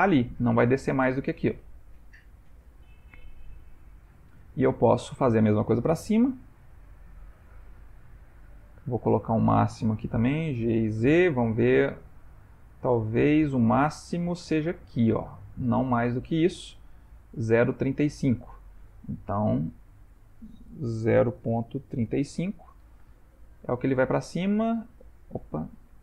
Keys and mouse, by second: 4.5 ctrl+middle click, 5.0 ctrl+middle click, 5.9 g, 9.9 click, 10.6 g, 19.8 click, 20.1 click, 23.5 g.